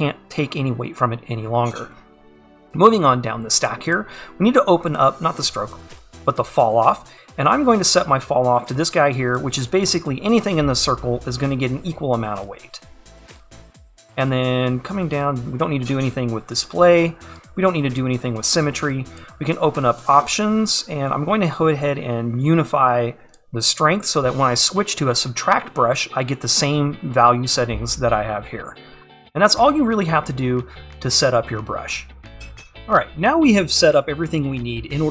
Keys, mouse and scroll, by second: 32.8-35.1 scroll up 1.